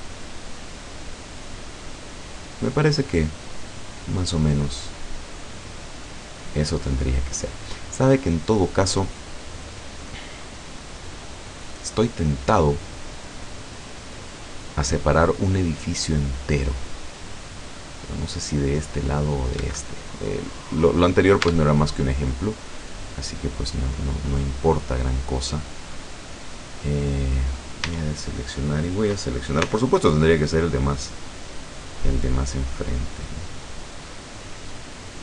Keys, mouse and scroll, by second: 19.6 Escape, 20.8 click, 21.5 Tab, 22.4 right click, 22.7 middle click, 22.9-23.4 scroll up 2, 23.4-23.7 scroll down 1, 26.2-27.6 middle drag, 27.9 a, 29.7 c, 31.0-35.2 drag.